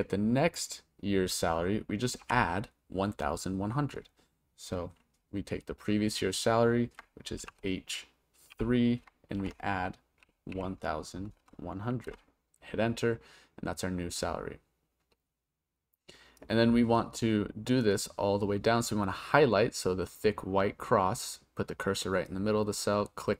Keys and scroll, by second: 2.2 =, 7.4 shift+h, 8.5 3, 9.4 shift+=, 12.1 Return.